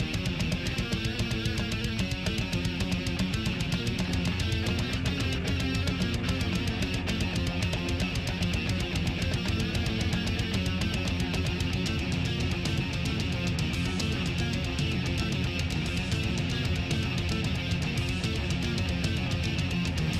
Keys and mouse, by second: 1.0 click, 3.0 click, 4.0 click, 6.4 click, 7.9 click, 9.8-13.0 drag, 13.2-14.8 drag, 15.1-16.4 drag, 17.0-18.2 drag, 18.8 click, 19.7 click.